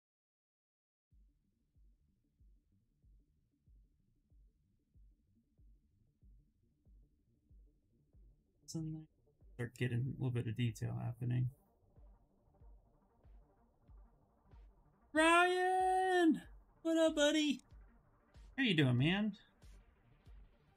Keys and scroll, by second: 20.1 s.